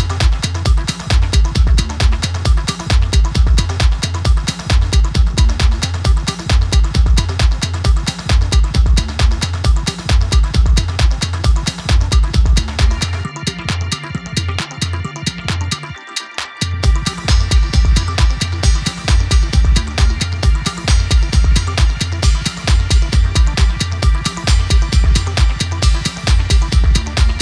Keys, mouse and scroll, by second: 3.9-4.5 alt+scroll up 1, 7.0-7.3 alt+scroll up 1, 8.3 click, 10.6 click, 14.0-16.2 typing, 16.3 ctrl+a, 17.4 click, 19.9 click, 22.6 ctrl+t, 24.2-25.9 drag, 26.8-27.4 drag.